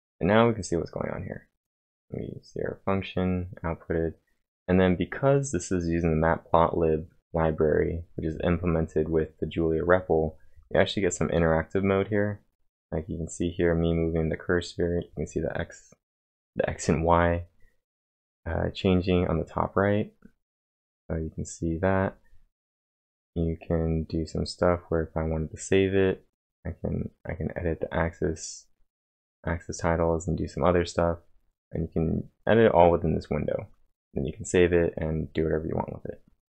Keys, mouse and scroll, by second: 0.0-0.1 typing, 1.6-4.6 typing, 31.5-34.0 drag.